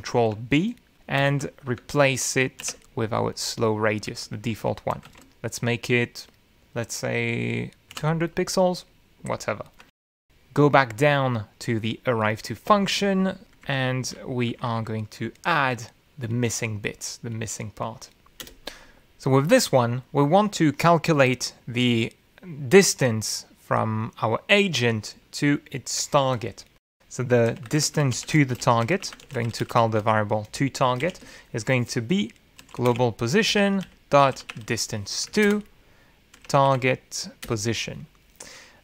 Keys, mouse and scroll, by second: 0.0 ctrl+b, 1.2 ctrl+Right, 2.8 ctrl+Right, 4.6 ctrl+shift+Left, 6.0 ctrl+v, 7.4 Right, 9.7 2, 13.9 ctrl+Down, 15.4 Page_Down, 15.9 Up, 18.5 Return, 19.3 BackSpace, 28.1-32.0 typing, 33.2-38.1 typing, 34.4 Return, 36.1 Down, 36.3 Return, 38.3 Return.